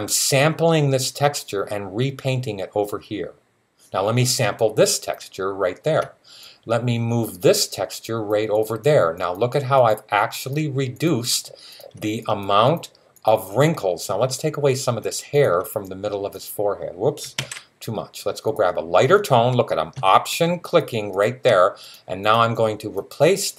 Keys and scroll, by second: 17.2 z.